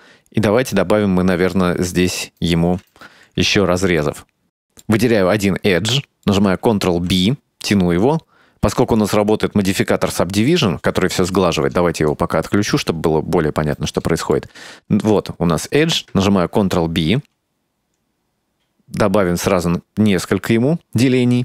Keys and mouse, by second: 2.1 right click, 2.9 2, 3.1 right click, 3.6 middle click, 5.2 middle click, 6.1 middle click, 7.2 ctrl+b, 12.1 click, 12.4 click, 12.7 click, 13.1-14.4 middle drag, 15.3 shift+middle click, 16.7 ctrl+b.